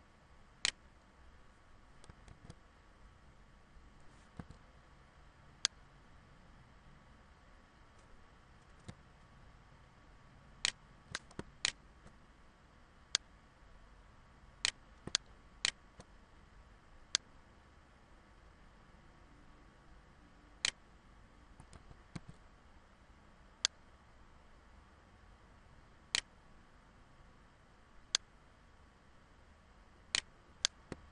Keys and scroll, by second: 1.8 alt+z, 4.4 ctrl+z, 21.3 ctrl+z, 22.3 ctrl+z.